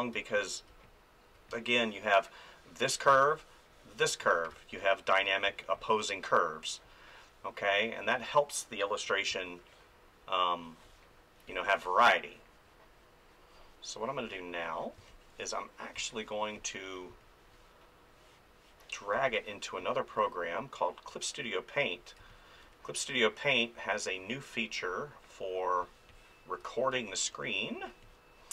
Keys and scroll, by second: 0.1 space, 3.1 ctrl+z, 4.5 space, 9.3 space, 15.0 space, 19.1 space, 22.2 space, 25.8 space.